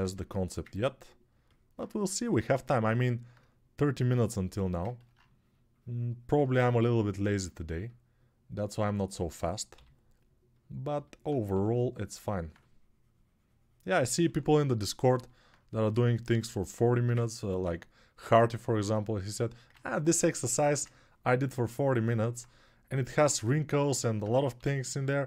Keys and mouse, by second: 9.5 g, 11.3 6, 14.0 1, 18.1 alt+shift+right click, 18.4-25.2 ctrl+alt+drag, 24.3 g.